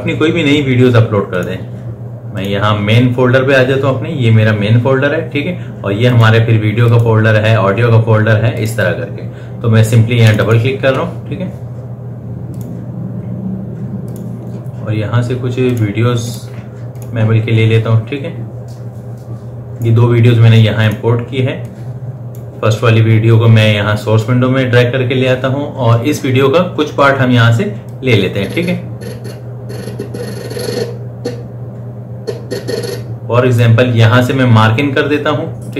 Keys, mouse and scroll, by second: 1.7 click, 6.4 click, 14.8-15.9 scroll down 1, 16.0 click, 21.1-25.2 drag, 28.2-35.7 drag.